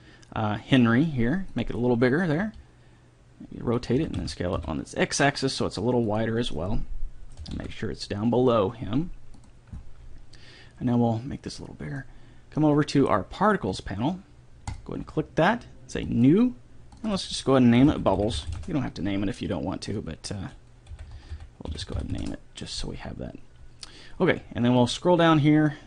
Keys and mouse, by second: 0.0 s, 2.9 r, 4.4 s, 7.9 g, 12.1-13.6 drag, 13.6 middle click, 15.1-19.3 drag, 18.7 b, 20.3-22.1 drag.